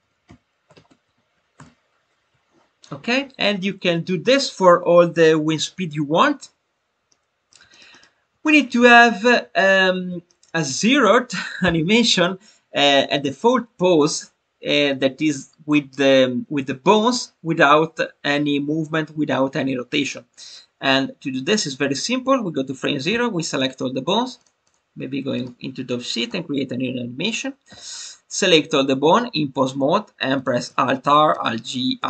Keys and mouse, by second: 0.1 e, 23.5 click, 24.6-25.4 drag, 30.6 alt+r.